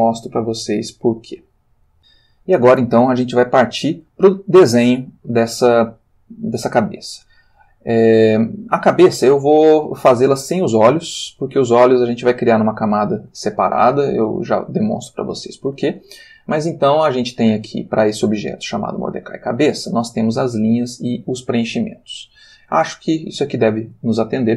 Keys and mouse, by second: 1.4 x, 1.8 click, 15.8 click, 24.3 ctrl+middle click.